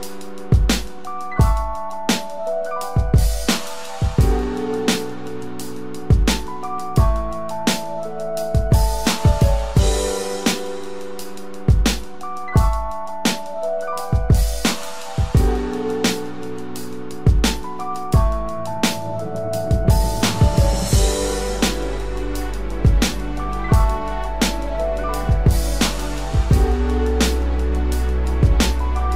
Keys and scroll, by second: 28.5 ctrl+-.